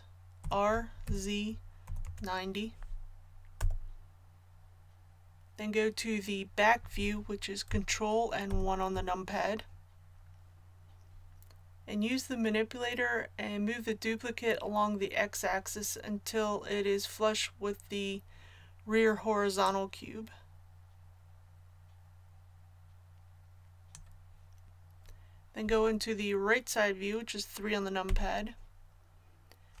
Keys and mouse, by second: 19.6-21.5 drag, 28.0 KP_3.